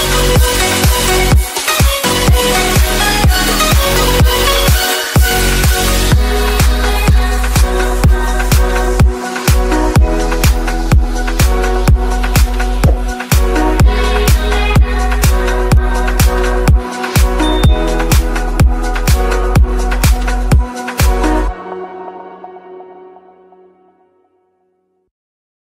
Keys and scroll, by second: 4.5 ctrl+a, 10.2 ctrl+space, 18.3 ctrl+g.